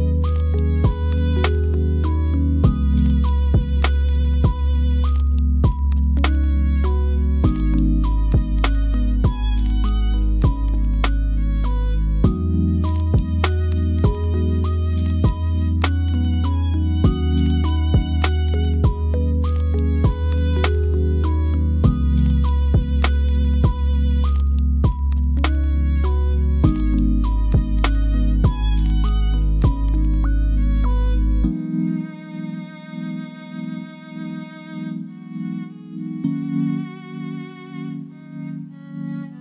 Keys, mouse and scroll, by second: 0.9 KP_1, 8.6 KP_7, 9.3-11.7 drag, 13.3 shift+s, 15.8 KP_1, 18.4-19.9 drag, 22.6 click, 25.9 ctrl+a, 26.9 s, 28.9 drag, 29.8 click, 31.2-31.8 drag, 31.8 g, 33.6 s, 34.8 s, 37.3 s, 38.9-39.4 middle drag.